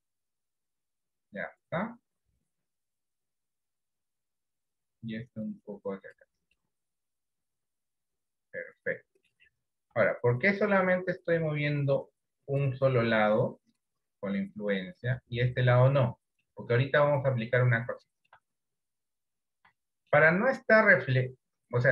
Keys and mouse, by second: 5.6 click, 6.6-9.4 middle drag, 10.0 KP_1, 11.6-12.7 drag, 14.7 click, 16.6 shift+middle click, 18.1 shift+middle click, 19.3 click, 19.9 shift+middle click, 21.1-21.9 drag.